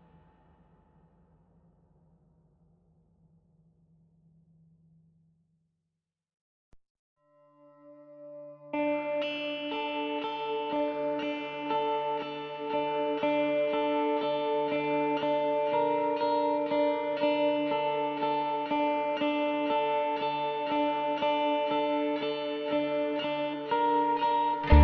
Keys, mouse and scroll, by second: 9.8 click.